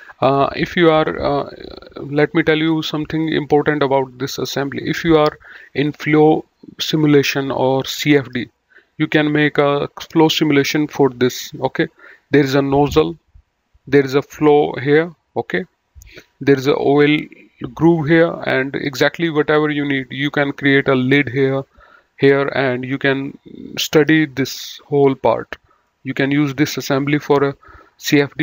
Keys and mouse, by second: 20.0 middle click, 25.7 middle click, 27.4 middle click.